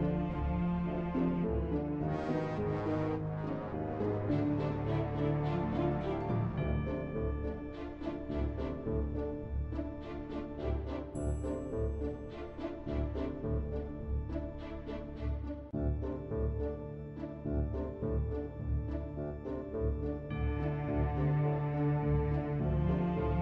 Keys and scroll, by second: 1.3 ctrl+w.